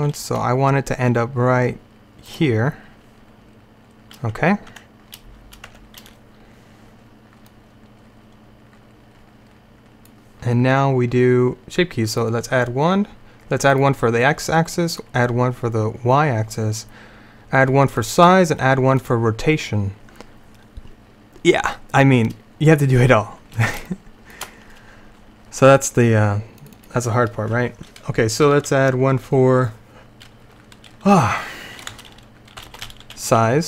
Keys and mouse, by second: 0.2 g, 4.8 Tab, 5.8 Tab, 7.6-8.9 drag, 12.2-16.8 drag, 18.1-21.1 drag, 21.1-22.9 middle drag, 23.9-26.0 middle drag, 26.7-28.8 drag.